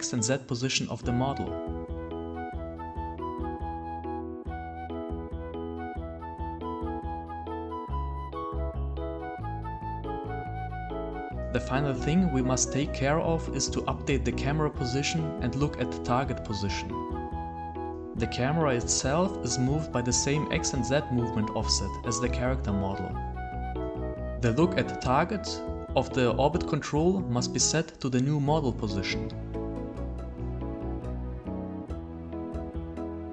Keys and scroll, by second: 5.4 w, 6.1 a, 6.8 s, 7.4 d, 9.2-16.5 typing.